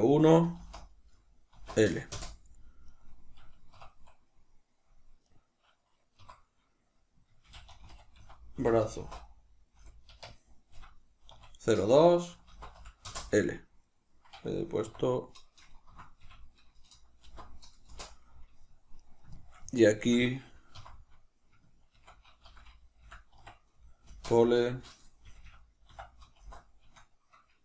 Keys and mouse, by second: 2.8 right click, 3.6 F1, 5.1 right click, 6.1 F2, 18.9 right click, 19.3-27.6 shift+middle drag, 20.6 F2, 25.4 BackSpace.